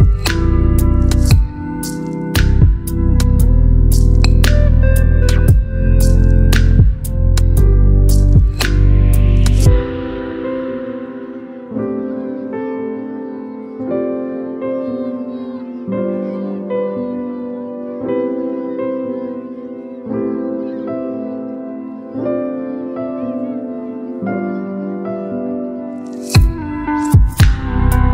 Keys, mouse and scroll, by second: 5.7 click, 13.0 ctrl+click, 14.5 click, 16.5 alt+BackSpace, 18.2 ctrl+d, 20.2 click.